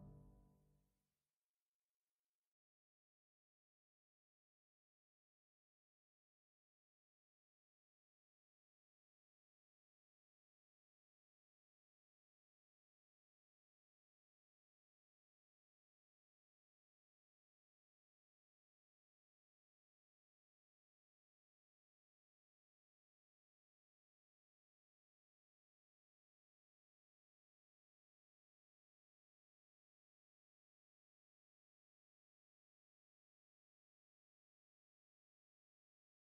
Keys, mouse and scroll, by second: 0.0 e, 1.3 click, 3.2 e, 4.3 click, 4.5 s, 5.5 click, 7.7 1, 8.0-11.8 right drag, 11.3 g, 11.8 click, 12.6 click, 13.0 z, 13.4-15.6 middle drag, 13.6 scroll up 1, 14.6 KP_0, 15.0 z, 15.6 click, 15.9 2, 16.5 ctrl+r, 17.7 click, 17.7 ctrl+z, 18.3 click, 18.9 click, 19.1 ctrl+z, 21.2 g, 21.6 click, 22.0 e, 22.4 click, 22.7-23.8 right drag, 23.5 g, 23.8 click, 23.9 g, 24.2 click, 25.3 Tab, 27.3-31.3 drag, 27.6 Delete, 30.8 g, 32.1 click, 32.2 s, 32.6 ctrl+z, 33.2 s, 34.2 click, 34.4 KP_1, 34.8 g, 35.6 click, 35.8 KP_3.